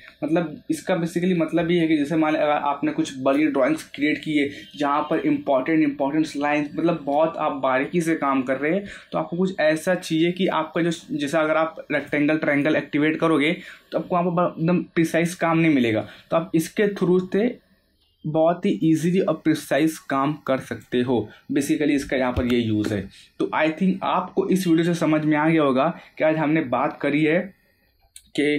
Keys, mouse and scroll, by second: 0.1 scroll up 1, 0.7 middle click, 0.8 middle click, 11.9 click, 16.5-23.2 drag.